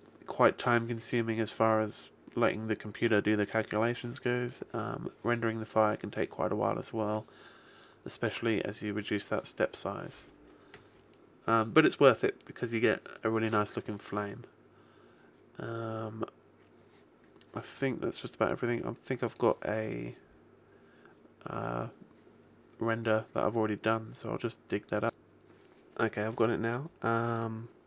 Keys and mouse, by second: 0.5-4.1 middle drag, 7.7 click, 15.6-18.5 middle drag.